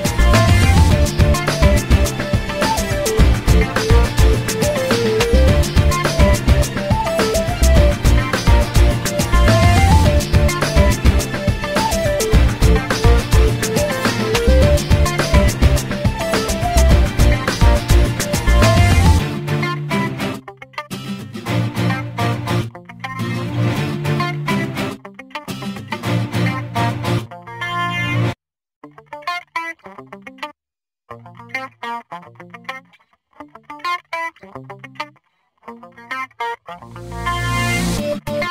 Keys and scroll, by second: 2.5 space, 14.1 l, 15.9 5, 16.0 0, 16.5 Return, 22.2 5, 22.3 0, 23.1 Return, 25.7 Escape.